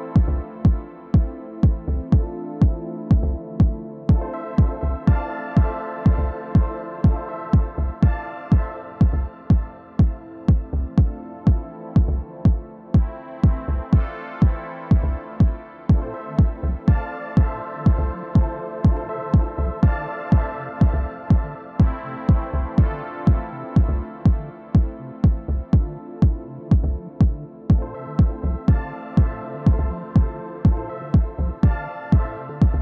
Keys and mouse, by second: 0.2-4.3 drag, 4.3-8.0 middle drag, 9.5-13.7 middle drag, 13.5 alt+w, 15.9 f, 16.5-27.0 drag, 26.9-28.1 middle drag, 28.1-29.8 drag, 29.2 g, 29.5 f, 30.0-31.0 drag, 32.6-32.8 drag.